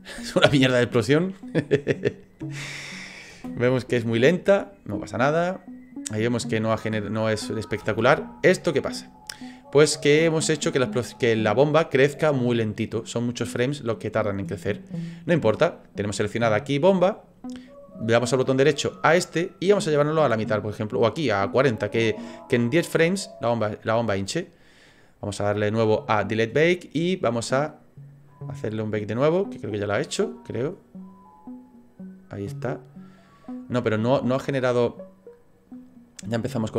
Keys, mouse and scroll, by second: 1.7 click, 2.3 click, 3.3 space, 3.7 middle click, 7.8 space, 9.2 click, 18.0 right click, 19.0 right click, 22.3 click, 26.3 click, 27.0 click, 33.8 click, 34.5 click.